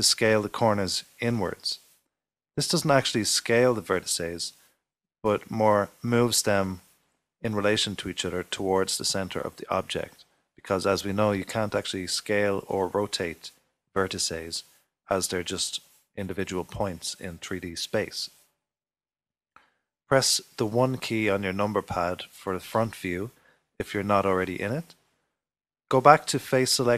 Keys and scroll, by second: 3.0-3.7 typing, 21.4 typing.